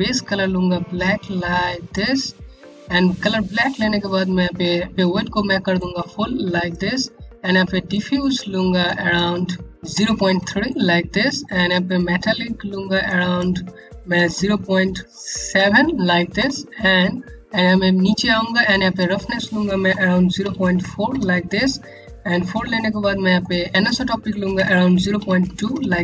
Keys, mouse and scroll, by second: 5.3 click, 9.8 KP_3, 9.9 KP_Enter, 11.0-11.7 scroll down 1, 11.7-12.6 scroll up 1, 12.6 click, 13.7 KP_0, 13.9 KP_Decimal, 15.9 KP_Enter, 16.9-17.5 scroll down 1, 18.3 click, 19.4 KP_0, 20.0 KP_Decimal, 20.3 KP_4, 20.6 KP_Enter, 22.3-22.9 scroll down 1, 22.9 scroll up 1, 23.7 click, 24.1 KP_0, 24.7 KP_Decimal, 25.0 KP_2, 25.3 Return.